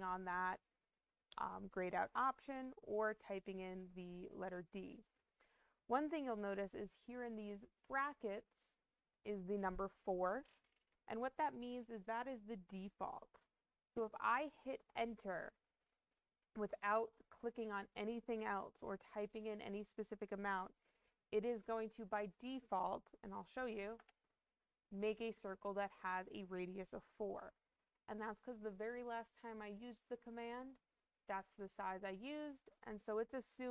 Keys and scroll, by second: 23.9 Return.